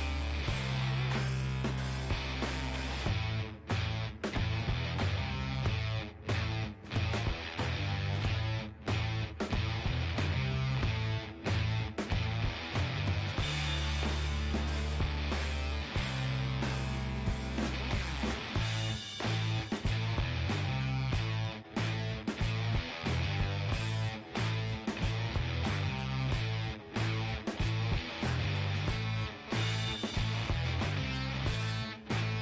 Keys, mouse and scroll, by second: 2.6 click, 3.2-5.5 right drag, 5.3 g, 6.6-8.5 right drag, 6.9 g, 10.1-15.3 middle drag, 12.5-14.0 drag, 12.8 g, 13.8 g, 14.0 right click, 15.3-17.1 right drag, 15.6 g, 16.5-19.6 middle drag, 18.9 KP_3, 19.6 KP_1, 22.7-25.3 middle drag, 23.9-27.6 right drag, 26.0 g, 28.4-30.7 right drag, 29.2 g, 30.8-32.4 right drag, 31.2 g.